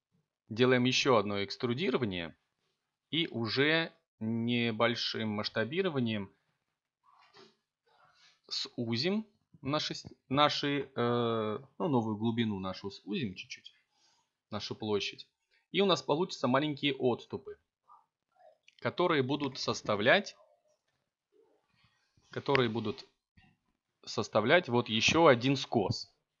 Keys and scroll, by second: 0.0 s, 1.1 y, 6.2 0, 7.2 ., 8.1 9, 8.4 8, 10.1 Return, 12.0 s, 12.8 z, 26.3 s.